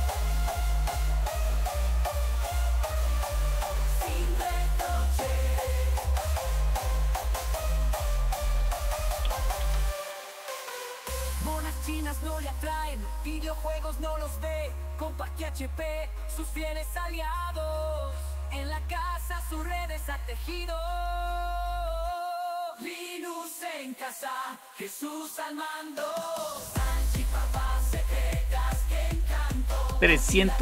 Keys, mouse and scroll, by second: 8.1 click, 9.1-12.0 typing, 15.2 typing, 20.7 click, 22.8 super+Return, 24.5-25.7 typing, 30.5-30.6 drag.